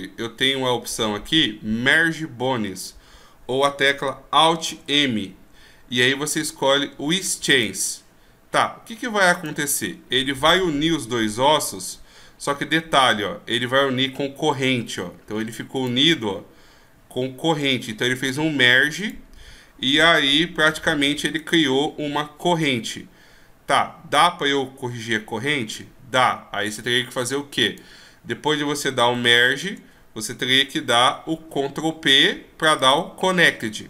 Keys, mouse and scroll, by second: 4.9 alt+m, 9.6 right click, 10.7 right click, 11.7 g, 16.0 right click, 16.5 g, 19.3 right click, 20.2 right click, 20.5 g, 21.6 right click, 22.3 g, 27.9 right click, 29.6 shift+right click, 31.3 ctrl+p.